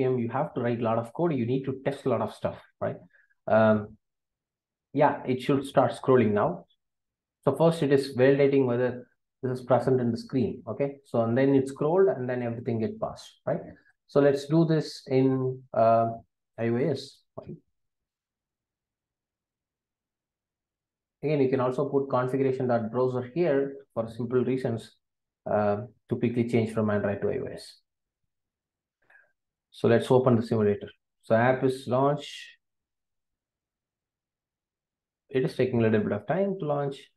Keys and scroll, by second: 18.4 Return.